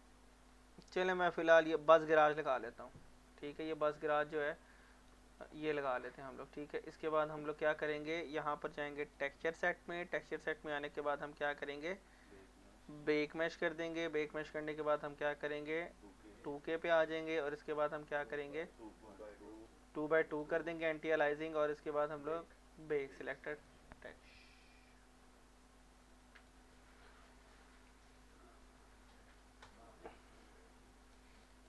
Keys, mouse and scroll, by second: 0.5-1.9 scroll up 1, 1.9 click, 3.6 alt+click, 4.1 alt+right click, 4.4 alt+click, 4.9 alt+right click, 5.2 click, 6.9-9.0 drag, 10.2-12.0 scroll down 1, 12.0 click, 12.6 scroll down 1, 13.3 click, 17.0 scroll down 1, 18.7 click, 21.0 scroll down 1, 22.8 click, 26.4 click, 29.3-31.3 right drag, 31.3 click.